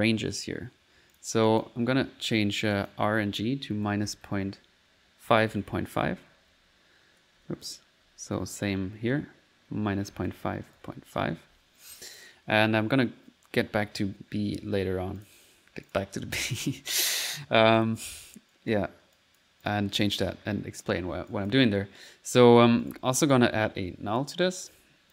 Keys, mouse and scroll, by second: 2.8 click, 15.2 click, 15.9 click, 16.6 click, 17.3 middle click, 17.6 click, 18.5 right click, 19.2 click, 20.0 middle click, 22.9 right click.